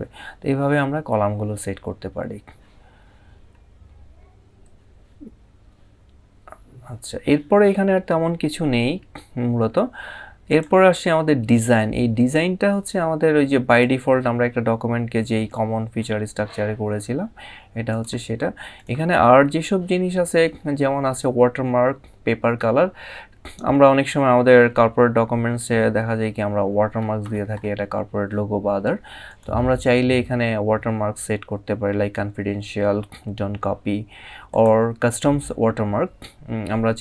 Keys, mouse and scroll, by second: 10.1 click, 13.3 click, 17.6 click, 24.3 scroll down 1, 26.3 scroll up 2, 28.9 click, 34.2 click.